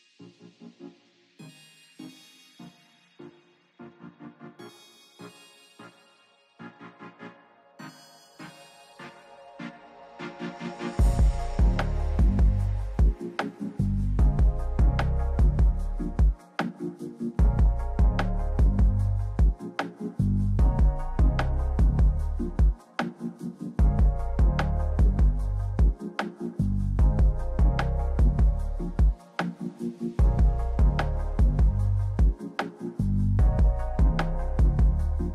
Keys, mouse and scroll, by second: 0.7 right click, 2.1 Up, 2.1 Right, 2.1 Down, 2.1 Left, 3.9 ctrl+b, 6.2 click, 6.8 click, 7.4 click, 8.1 right click, 8.6 click, 9.3 click, 9.7 click, 11.3 click, 14.7-17.3 drag, 17.8-19.7 drag, 20.6 click, 23.3 click, 25.1 click, 29.6 click, 31.6 click, 32.9 click.